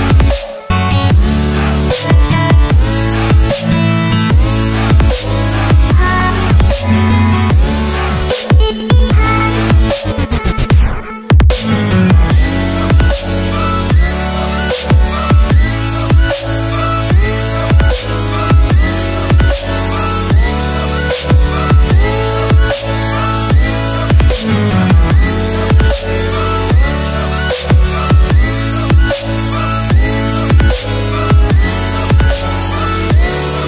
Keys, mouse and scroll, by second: 10.4 Return, 17.0 alt+Num_Lock, 17.0 alt+click, 19.7 Return, 26.0 click, 28.9 Return, 32.5 click.